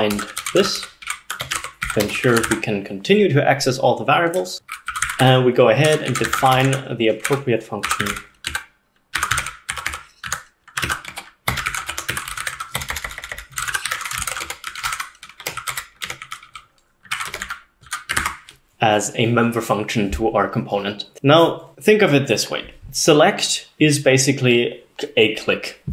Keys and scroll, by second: 0.0-2.7 typing, 4.7-14.8 typing, 14.8 ctrl+alt+7, 14.9 ctrl+alt+0, 15.4 Escape, 15.8 Up, 16.1 Escape, 16.5 Escape, 17.2 Escape, 17.3 Escape, 17.9 Escape, 18.3 ctrl+s.